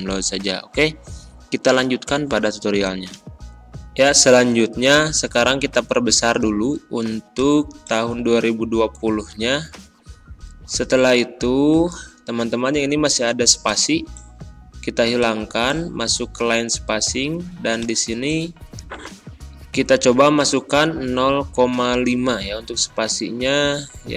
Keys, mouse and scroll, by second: 3.2 click, 3.9 ctrl+], 7.2 click, 8.7 ctrl+a, 13.6 click, 17.7 click.